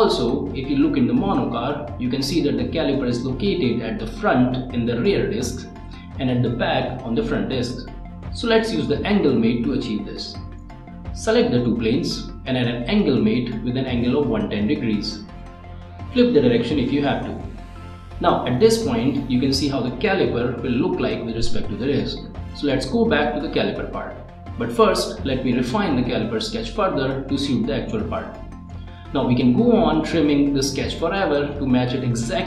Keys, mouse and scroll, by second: 0.9-1.8 scroll up 1, 3.4 scroll up 1, 3.6 ctrl+click, 5.2 click, 8.1-9.7 typing, 12.7 click, 13.9-14.9 scroll up 1, 16.0 middle click, 18.9 click, 19.9 middle click, 22.5 click, 23.3 click, 24.0 click, 24.9 middle click, 25.1 click, 25.9 click, 26.4 right click, 27.6 click, 28.4 click, 28.9 click, 29.4 click, 29.8 click, 30.4 click, 31.8 click.